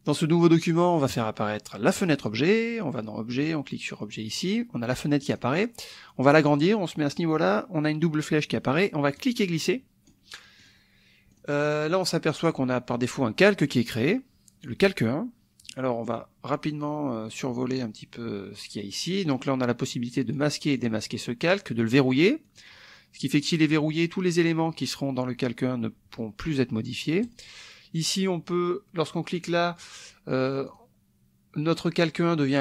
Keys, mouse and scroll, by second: 1.1 click, 2.0 click, 3.3 click, 5.3 click, 9.2-10.3 drag, 10.6 click, 11.3 click, 14.0 click, 20.3 click, 20.8 click, 21.8 click, 22.4 click, 23.2 click, 27.2 click, 29.4 click, 30.7 click.